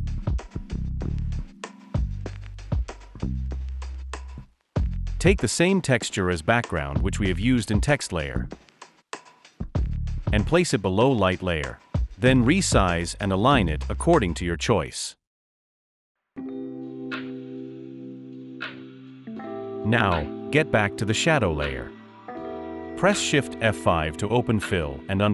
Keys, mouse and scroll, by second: 0.5-2.2 typing, 2.2 Return, 11.0-11.5 alt+scroll down 1, 12.7 alt+shift+click, 14.7 alt+shift+click, 24.4 shift+F5.